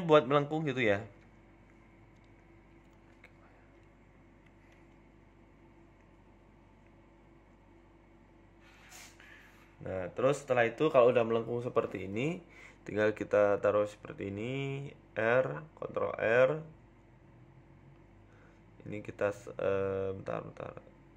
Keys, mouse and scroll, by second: 0.9 e, 2.7 e, 4.4 scroll down 4, 4.6 shift+middle click, 4.9 scroll up 2, 5.1 shift+middle click, 5.6-6.4 scroll up 2, 5.9 click, 6.4 ctrl+b, 8.8 click, 9.4 ctrl+b, 11.2 Tab, 11.4 middle click, 11.7-12.0 scroll down 3, 11.9 middle click, 12.3 KP_1, 12.8-13.7 scroll up 3, 13.1 s, 15.1 ctrl+r, 15.6 Tab, 15.9 ctrl+r, 19.9 click, 20.7 middle click.